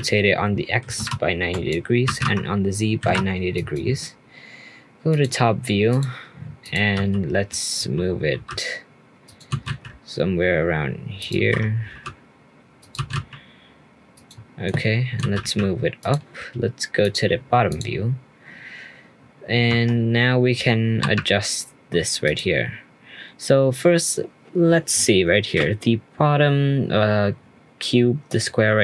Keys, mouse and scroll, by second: 2.0 r, 5.1 click, 5.9 click, 6.9 g, 9.5 g, 11.3 g, 12.9 g, 14.6-15.0 middle drag, 15.2 g, 17.0 click, 17.7 click, 18.0-19.7 scroll up 2, 19.7 Tab, 19.8-21.0 scroll up 4, 21.0 3, 22.2 click, 23.5 scroll up 1, 28.2-28.8 drag.